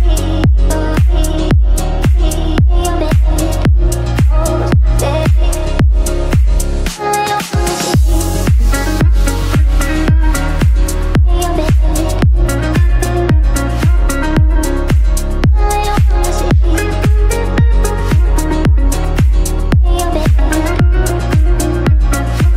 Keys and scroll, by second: 4.0 ctrl+r.